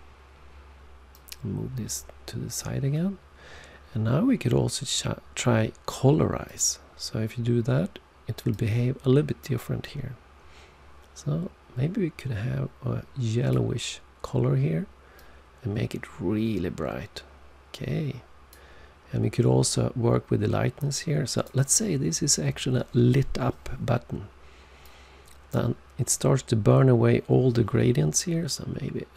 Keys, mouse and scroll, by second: 1.1 click, 6.4 click, 8.5 click, 15.1 click, 19.6 click, 24.8 click.